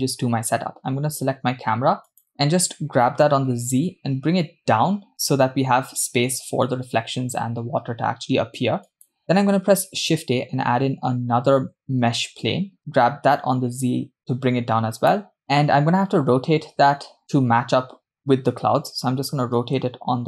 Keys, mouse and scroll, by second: 0.5 click, 2.3 click, 3.7 g, 10.5 shift+a, 13.3 g, 19.4 r.